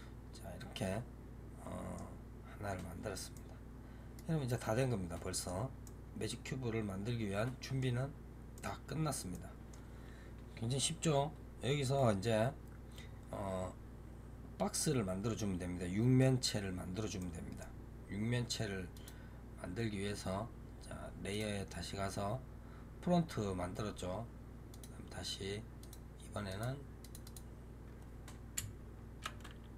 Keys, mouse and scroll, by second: 8.2 scroll down 2, 8.4-12.2 middle drag, 17.1-18.8 middle drag, 18.8 click, 21.2 click, 24.6-25.8 drag, 26.4 click, 26.9 click, 27.1-29.7 drag.